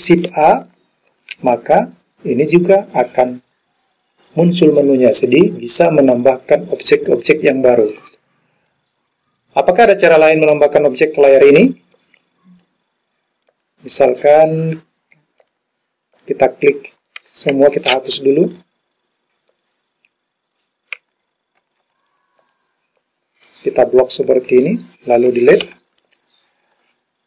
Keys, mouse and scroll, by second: 0.4 shift+a, 8.1 click, 12.0 click, 13.5 click, 14.1 click, 15.4 click, 16.2 click, 17.6 ctrl+a, 18.5 click, 19.6 click, 21.7 ctrl+a, 23.0-24.7 drag, 25.7 Delete.